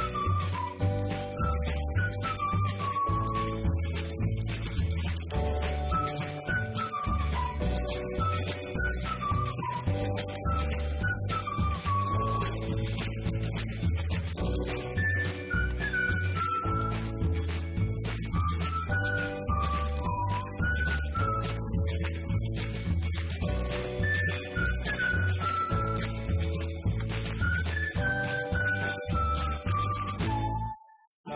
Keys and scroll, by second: 15.0 9, 22.9 5, 24.8 2.